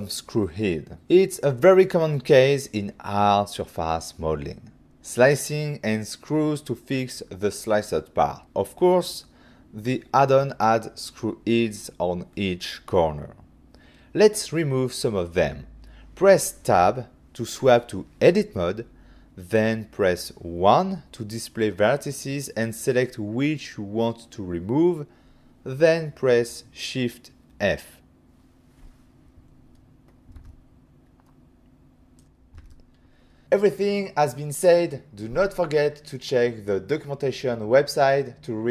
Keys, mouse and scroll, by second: 1.1 click, 1.2 click, 3.0 click, 3.1 click.